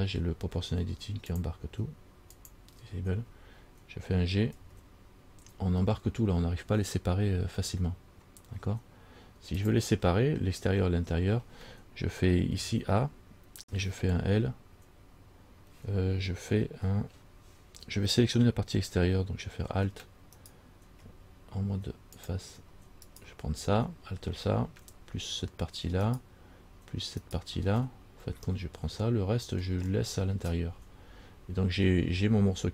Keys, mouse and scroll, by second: 1.5 click, 4.8 g, 12.8 a, 20.6 alt+right click, 22.4 click, 23.3 alt+right click, 26.3 alt+shift+right click, 27.4 alt+shift+right click, 28.7 middle click.